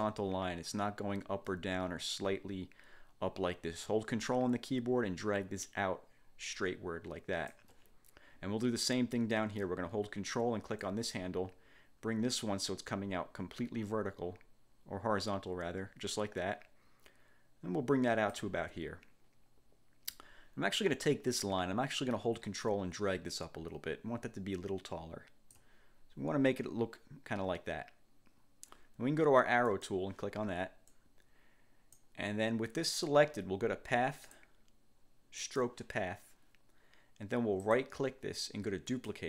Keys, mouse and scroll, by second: 10.9-18.7 ctrl+drag, 22.6-25.8 ctrl+drag, 29.8 click, 31.0-32.3 drag, 34.3 click, 35.5 click, 37.8 click, 39.0 click.